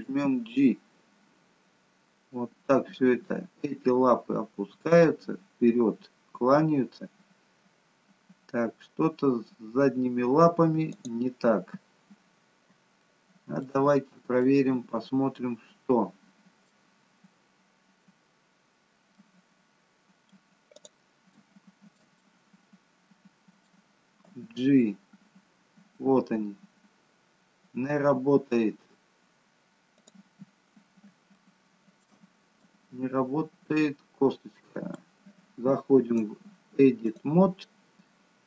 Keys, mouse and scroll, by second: 0.0 g, 12.3-12.7 scroll up 2, 13.0 shift+middle click, 14.0-14.4 scroll up 1, 14.4 middle click, 16.9-17.4 scroll down 2, 19.1 middle click, 20.7 click, 21.2 shift+middle click, 22.1 middle click, 24.3 g, 30.5-31.0 scroll up 3, 31.4 shift+middle click, 32.6 middle click, 36.0 click.